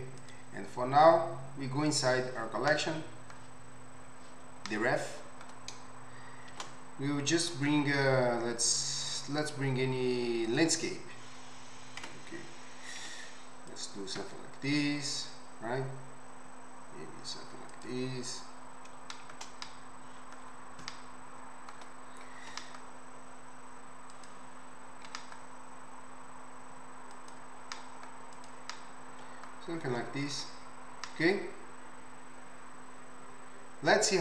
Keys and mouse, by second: 0.3-1.9 middle drag, 2.0-4.8 middle drag, 4.8-5.2 right drag, 6.5 shift+a, 12.0 Tab, 13.0 s, 14.7 s, 15.2 right click, 15.7-17.7 middle drag, 18.3 right click, 18.9-21.4 shift+middle drag, 22.5 s, 23.4-25.1 right drag, 25.1 g, 25.8 right click, 27.6 g, 30.4 Tab, 31.1-31.4 middle drag, 31.1-32.0 right drag, 31.7 middle click, 32.0-34.2 middle drag.